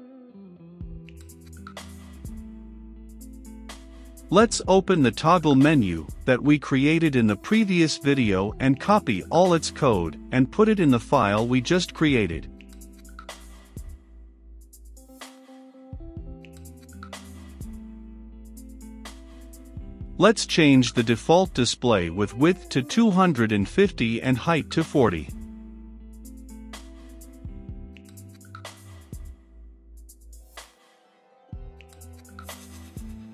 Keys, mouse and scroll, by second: 9.8-11.6 drag, 9.8-11.6 scroll, 11.6-12.6 right drag, 12.6-14.6 drag, 14.6 middle click, 15.2 click, 16.7 ctrl+v, 17.4-18.4 middle drag, 18.4 click, 18.8-20.6 middle drag, 20.6-33.0 drag, 33.0-33.3 middle drag.